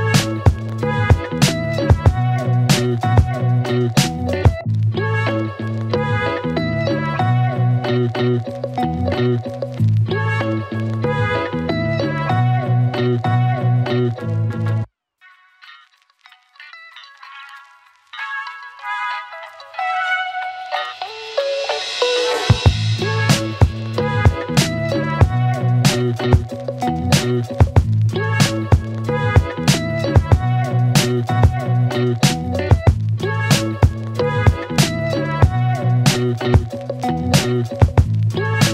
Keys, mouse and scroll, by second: 2.6-3.6 click, 13.7-15.2 click, 17.1-19.5 click, 20.4-22.2 click, 23.4-24.5 click, 24.9 space, 30.6 space, 31.9 click, 33.1 u, 35.4-37.6 click.